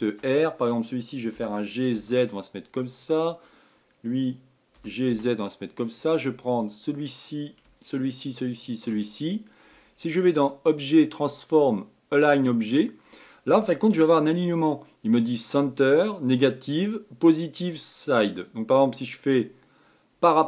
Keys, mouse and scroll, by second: 0.4 click, 1.3 g, 2.9 click, 4.7 g, 6.6 drag, 7.7 shift+click, 8.2 shift+click, 8.6 shift+click, 10.2-13.3 drag, 15.3-18.4 drag.